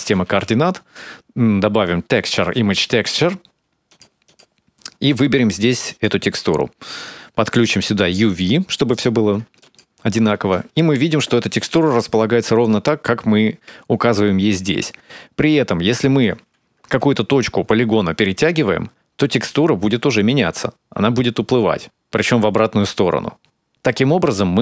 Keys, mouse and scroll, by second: 0.0 shift+a, 4.9 click, 6.8 click, 8.2 click, 9.5 ctrl+shift+click, 15.7 right click.